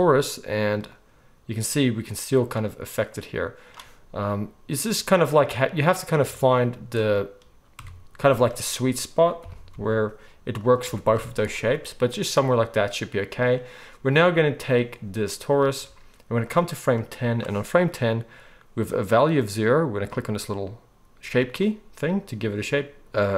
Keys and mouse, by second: 0.8-7.1 drag, 7.1-14.2 middle drag, 7.8 Tab, 8.3 z, 9.4 g, 10.8 Tab, 11.1 z, 14.6 click, 16.4-20.1 drag.